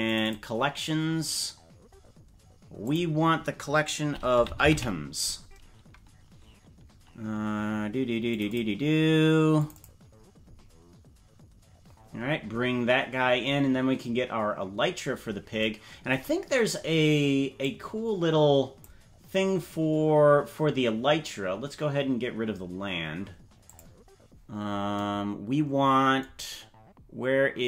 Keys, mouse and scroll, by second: 17.6-19.0 drag, 23.8 click.